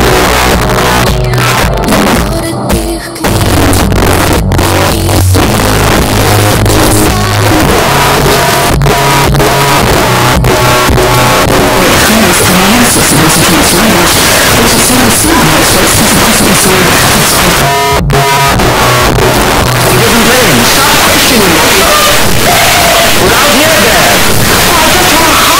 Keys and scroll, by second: 17.6 Page_Down.